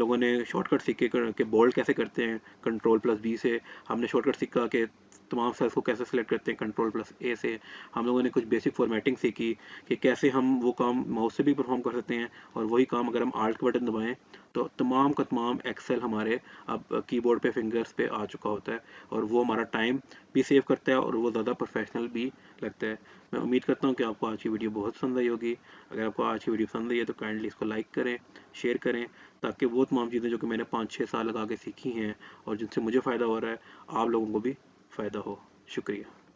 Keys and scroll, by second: 2.8 ctrl+b, 6.6 ctrl+a.